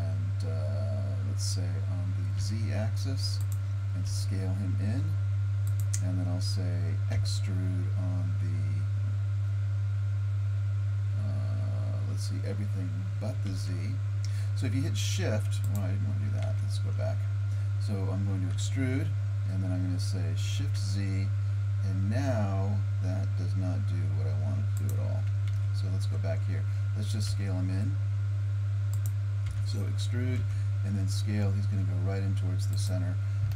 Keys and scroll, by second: 4.1 s, 7.2 e, 16.4 ctrl+z, 18.6 e, 25.5 ctrl+z, 27.3 s, 29.5 e.